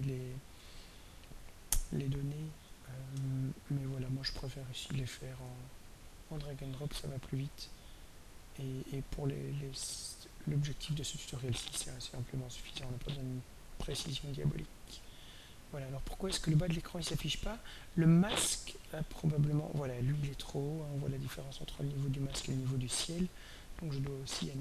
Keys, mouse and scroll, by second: 1.5-5.3 drag, 6.1 click, 7.4 click, 8.9-10.2 drag, 11.2-14.6 shift+drag, 18.9 click, 20.8 scroll down 2, 22.6 click, 24.4 click.